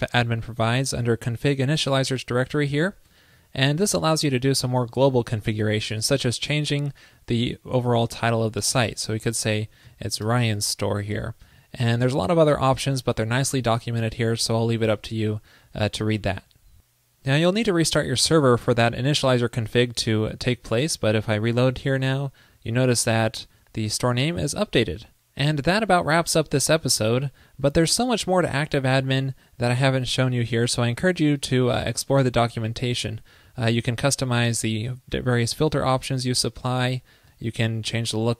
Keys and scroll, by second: 20.8 super+r.